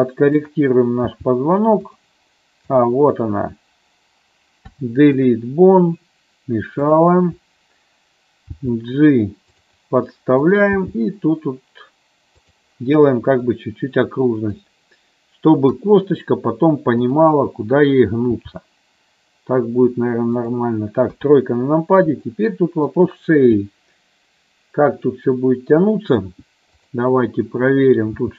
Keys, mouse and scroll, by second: 0.5 click, 1.1 g, 2.0 click, 4.8 Delete, 7.0 click, 8.6 g, 9.6 click, 10.9 g, 12.6 click, 13.6 middle click, 15.9 KP_1, 17.1 click, 18.5 g, 20.5 click, 21.2 KP_3, 22.4 shift+middle click, 27.0 click, 28.2 g.